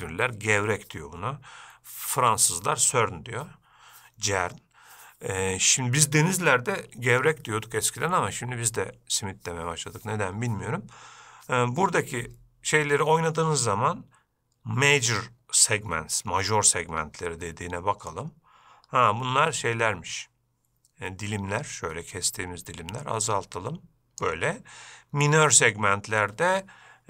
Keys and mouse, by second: 18.5-24.6 drag, 25.6-27.0 drag.